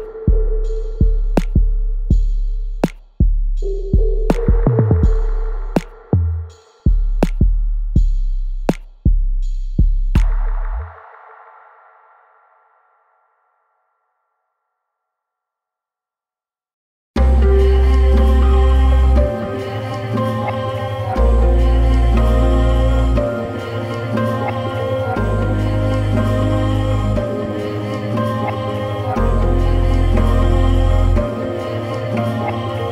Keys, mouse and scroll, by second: 0.9 Escape, 2.1 click, 3.3 Escape, 4.1 l, 4.7 x, 5.5 middle click, 7.7 click, 9.6 Escape, 9.9 click, 10.1 x, 10.5 Escape, 11.5 l, 14.7 click, 16.9 Escape, 17.9 l, 18.5 x, 19.9 click, 21.2 Escape, 22.1 l, 25.5 Escape, 25.9 click, 27.4 Escape, 27.7 scroll up 1, 28.3 scroll down 1, 28.8-29.2 scroll up 1, 29.5 click, 30.9 Escape, 31.3 click, 32.7-32.9 scroll down 1.